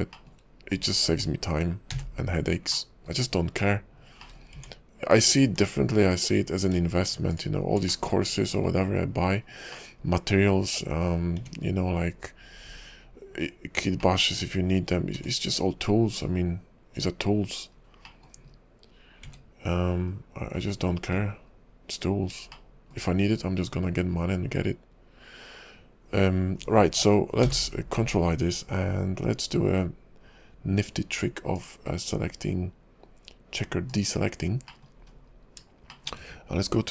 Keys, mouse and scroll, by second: 0.1 shift+middle click, 1.9 a, 2.7 middle click, 4.2 shift+middle click, 4.5 Tab, 6.1 alt+click, 7.6 alt+shift+click, 7.9 middle click, 8.7-9.1 scroll down 3, 8.9 KP_5, 9.3 scroll up 2, 9.7 middle click, 11.4 `, 14.0 middle click, 15.1 `, 17.7 scroll up 2, 18.0 middle click, 18.5 KP_5, 20.1 KP_5, 20.1 `, 20.6 scroll down 3, 21.4-22.4 scroll up 1, 22.5 shift+middle click, 27.4 ctrl+i, 31.6 click, 34.7 middle click, 35.0 scroll up 2, 35.9 shift+middle click.